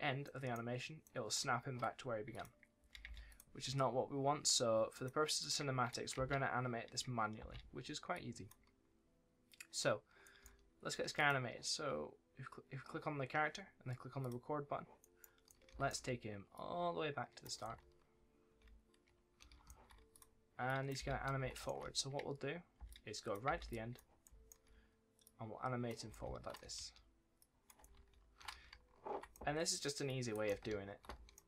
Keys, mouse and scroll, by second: 0.1 d, 2.2 click, 2.7 space, 3.2 click, 6.1 space, 8.1 click, 10.1 click, 10.3 a, 11.1 click, 14.1 click, 15.4 a, 16.5 click, 17.5 right click, 17.7-18.1 shift+scroll up 1, 18.4 shift+d, 18.6-19.4 scroll up 1, 19.4 s, 20.0 click, 20.9 space, 21.2 right click, 21.3 s, 22.7 space, 22.8 click, 23.4 space, 23.6 click, 24.1 right click, 24.2 s, 25.1 click, 25.8-28.4 typing, 27.3 click, 30.0 click, 30.4 right click, 30.4 w.